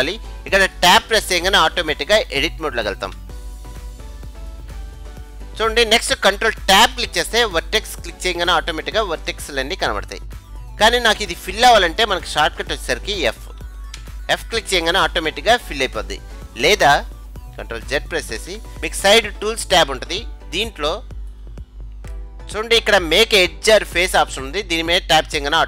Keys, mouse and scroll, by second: 3.2 Tab, 4.6-6.6 middle drag, 7.1 ctrl+Tab, 9.5-11.4 middle drag, 14.1 f, 18.5 ctrl+z, 20.1-23.2 drag.